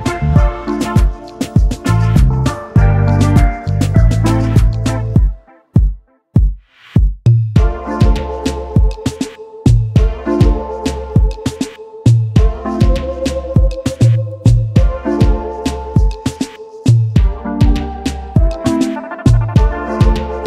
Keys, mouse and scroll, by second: 0.9 alt+click, 6.4 alt+scroll down 1, 6.7-7.1 alt+scroll up 1, 7.1 alt+scroll down 1, 8.4 ctrl+alt+3, 9.2 alt+scroll down 1, 9.9 space, 10.0 double click, 10.7 alt+scroll up 1, 11.0 space, 12.0-12.3 scroll down 1.